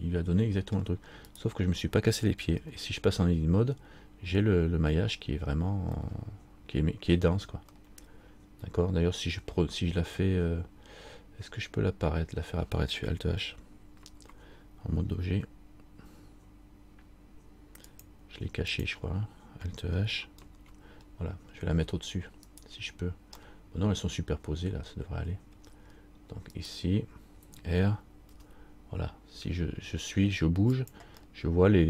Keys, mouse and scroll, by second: 1.5 right click, 2.7 Tab, 6.2 middle click, 7.9 middle click, 15.5 Tab, 18.1 click, 20.6 alt+h, 22.7 right click, 25.7 middle click, 26.7 right click, 31.4 middle click.